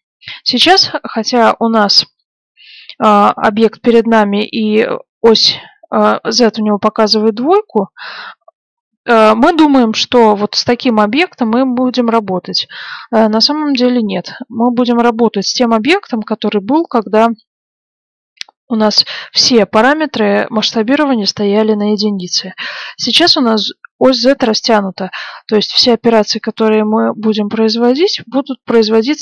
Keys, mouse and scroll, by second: 9.0-12.2 middle drag, 13.2 middle click, 14.6-16.1 middle drag, 28.0-29.2 middle drag.